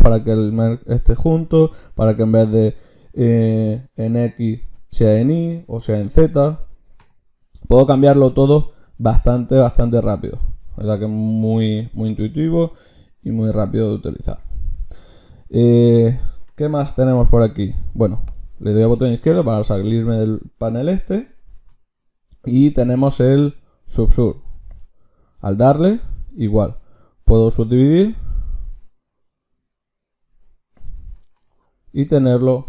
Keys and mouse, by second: 18.3-20.9 drag, 21.5 ctrl+shift+q, 31.6-32.6 drag.